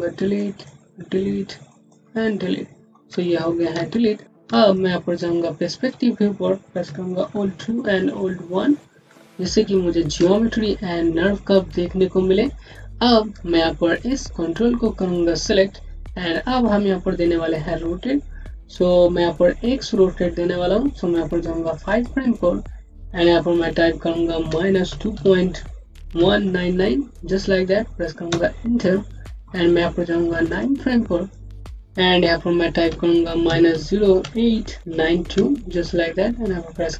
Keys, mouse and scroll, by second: 0.2 click, 0.7 Delete, 1.6 click, 1.9 Delete, 2.9 scroll down 1, 3.6 space, 3.8 click, 4.2 space, 4.6 click, 4.9 space, 7.2-7.8 typing, 8.4-8.9 scroll up 1, 9.0 alt+click, 11.5-13.0 scroll down 1, 13.4-14.2 scroll up 1, 14.2 click, 21.7 click, 27.2 KP_9, 28.1 Return, 30.4 click, 35.6 KP_2.